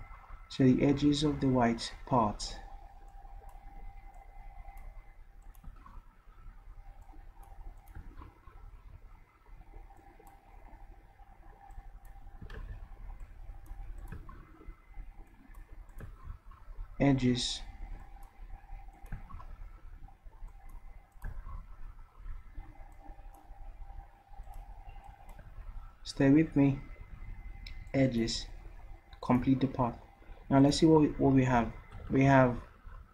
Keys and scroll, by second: 12.6 ctrl+z, 32.0 v.